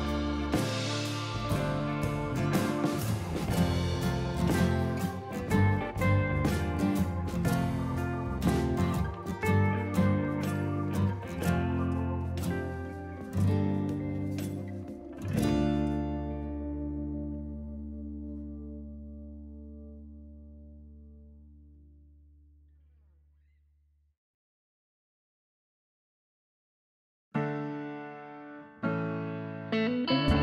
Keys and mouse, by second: 0.1 ctrl+1, 0.2 click, 0.3 right click, 0.5 click, 1.0 s, 1.6 ctrl+shift+x, 1.9 click, 2.9 click, 3.4 shift+click, 5.3 a, 5.3 click, 5.9 click, 7.8-9.7 typing, 9.3 click, 11.9 s, 12.5 click, 13.9 ctrl+z, 16.4 ctrl+1, 16.6 ctrl+e, 16.9 ctrl+q, 17.1 click, 18.9 ctrl+e, 19.2 ctrl+q, 19.3 click, 19.8 ctrl+1, 19.9 click, 24.4 ctrl+click, 25.5 ctrl+click, 26.1 s, 26.3 ctrl+click, 26.8 Escape, 27.2 ctrl+1, 27.5 click, 27.9 s, 28.3 ctrl+click, 28.9 click, 29.1 ctrl+click, 29.8 ctrl+click.